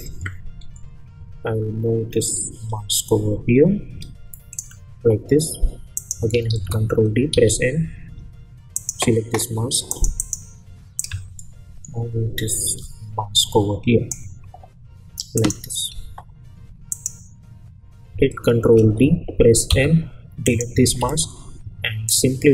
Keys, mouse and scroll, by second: 6.5 ctrl+d, 7.3 m, 8.7-15.3 drag, 15.9 u, 16.9 click, 18.7 ctrl+d, 19.7 m, 20.4-22.5 drag.